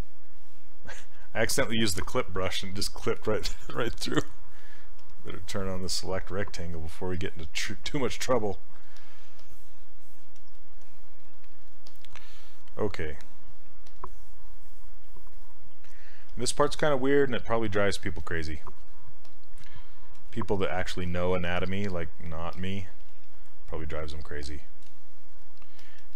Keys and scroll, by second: 1.0 ctrl+z, 20.2 ctrl+w.